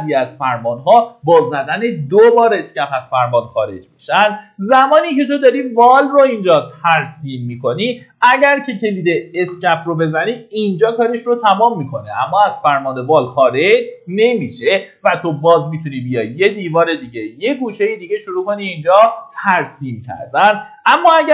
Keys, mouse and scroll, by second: 9.2 Escape, 16.1 click.